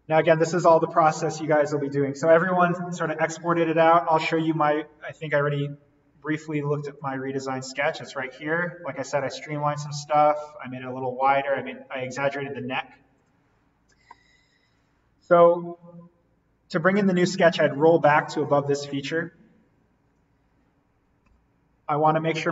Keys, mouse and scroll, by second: 4.6 click, 7.2 click, 13.1 click, 14.6 right click, 18.4 click, 21.2 alt+v.